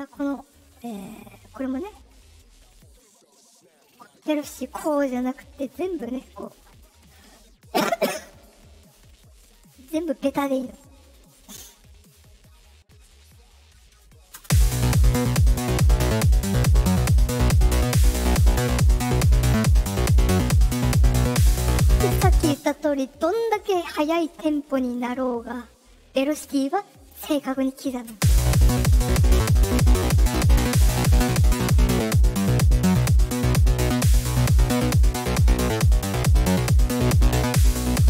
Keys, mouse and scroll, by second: 0.0 click, 0.2 click, 0.4 click, 1.1 click, 2.6 click, 5.7-7.1 right drag, 7.9-9.6 right drag, 12.4-13.9 right drag, 14.3 space, 15.3 click, 18.1 click, 18.9 click, 22.3 space, 24.0 click, 28.0 space, 31.2-37.3 drag.